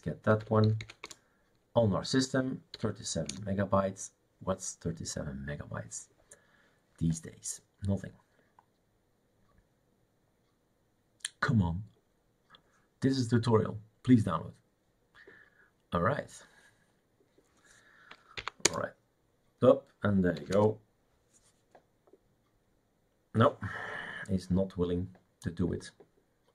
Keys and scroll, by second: 0.1-1.3 typing, 2.8 y, 3.3 Return, 18.4 Up, 18.7 Return, 20.4 typing, 20.6 Return.